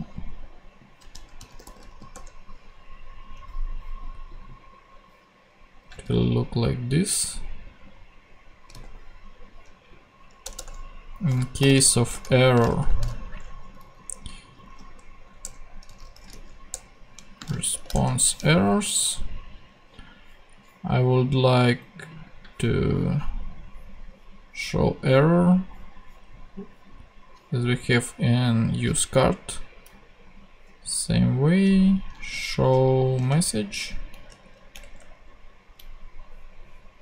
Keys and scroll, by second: 1.4-2.3 typing, 8.7 super+v, 10.4 Return, 11.3-12.8 typing, 14.3-16.6 typing, 15.4 Return, 16.7 Return, 17.1 Right, 17.7 shift+[, 17.9 shift+Return, 18.9 Return, 33.1 ctrl+super+c, 33.2 ctrl+super+Tab.